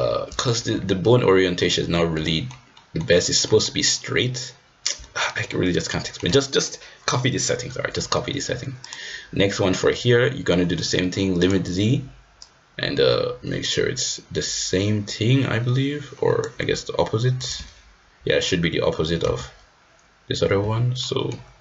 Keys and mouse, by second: 0.5 r, 2.2 middle click, 2.7 middle click, 3.5 middle click, 5.5-6.2 middle drag, 6.5 middle click, 7.9 middle drag, 8.9-10.0 drag, 10.0-10.5 middle drag, 11.5-15.0 drag, 15.0-16.4 right drag, 19.2 g, 21.0 middle drag.